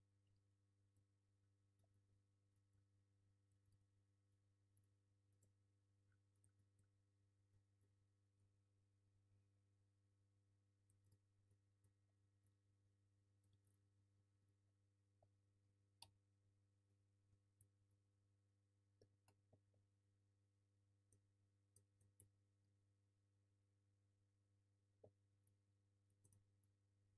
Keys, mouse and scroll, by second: 0.0-0.3 scroll down 1, 0.3 F3, 0.5-2.5 middle drag, 0.8 scroll down 1, 1.2 alt+z, 1.8 g, 2.5 click, 2.7-5.3 alt+middle drag, 3.3 scroll up 1, 4.3 q, 5.3 click, 5.4-6.3 alt+middle drag, 6.0 scroll down 2, 6.3 click, 6.4-7.5 alt+middle drag, 6.6 scroll down 2, 7.2 scroll up 2, 7.5 click, 7.8 g, 8.4 click, 9.4-11.5 middle drag, 10.7 scroll up 1, 11.0 Tab, 11.5 click, 11.7 alt+e, 12.2 Escape, 12.3 scroll up 1, 12.5-13.6 alt+middle drag, 12.6 alt+q, 13.5 2, 13.7 click, 13.9 scroll up 1, 14.1 1, 14.3-14.9 scroll down 2, 14.4 a, 14.9-16.8 middle drag, 16.2-16.8 scroll up 1, 16.8 click, 17.1 3, 17.3 click, 17.7 alt+e, 25.0 scroll up 1, 25.3 1, 25.4 click, 25.6 g, 26.0 click, 26.2 ctrl+z, 26.4 3, 26.6 click.